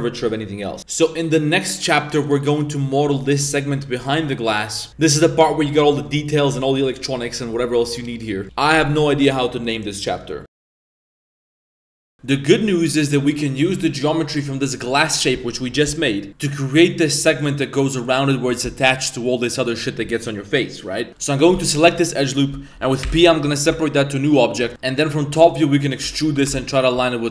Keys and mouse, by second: 12.7-13.1 middle drag, 13.3-13.6 middle drag, 13.9 middle drag, 21.1 middle click, 21.1 1, 21.1 g, 23.0 p, 23.7 Tab, 24.3 right click, 24.6 Tab, 24.7 ctrl+z, 24.7-26.3 typing.